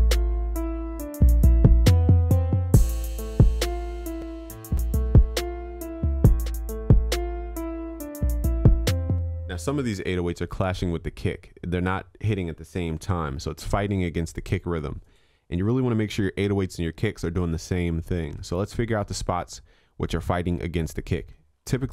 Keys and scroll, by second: 5.1 ctrl+s, 12.9 ctrl+s.